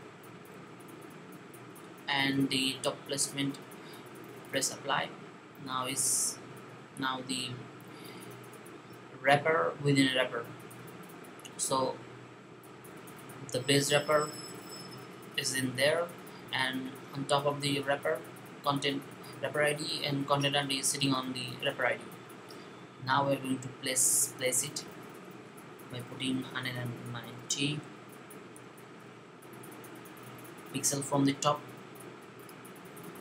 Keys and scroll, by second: 25.4-28.8 typing.